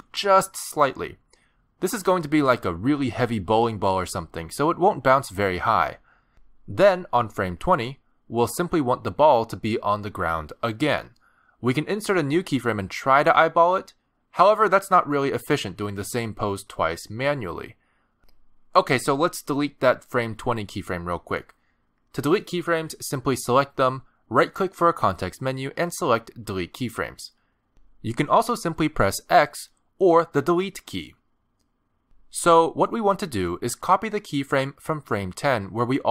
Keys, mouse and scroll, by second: 2.0 middle click, 2.8 scroll up 2, 3.2 g, 6.6 middle click, 7.6 scroll down 1, 8.9 click, 9.5 middle click, 10.4-10.9 scroll up 3, 10.9 middle click, 11.2 shift+middle click, 11.4 scroll down 1, 11.5 g, 13.3 middle click, 14.2 g, 17.1 middle click, 21.4 click, 25.3 right click.